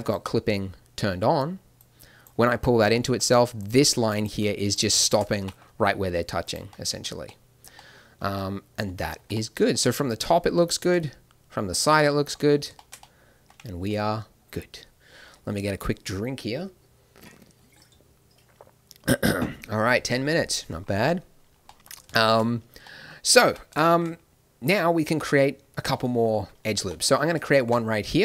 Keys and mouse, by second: 2.6-5.3 middle drag, 2.9-5.3 drag, 5.3 g, 6.7 click, 9.1 Tab, 18.2-21.6 middle drag, 23.4 Tab, 27.5 ctrl+r.